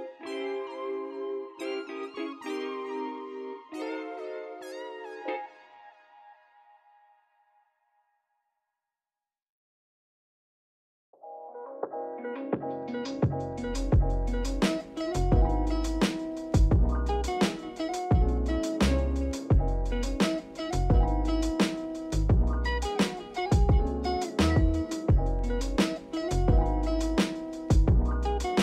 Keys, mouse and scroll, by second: 0.5-10.3 drag, 15.6 click, 16.8-19.2 drag, 19.2-20.7 shift+middle drag, 20.7 click, 21.0 scroll up 3, 21.9-24.4 drag, 26.3-28.6 drag.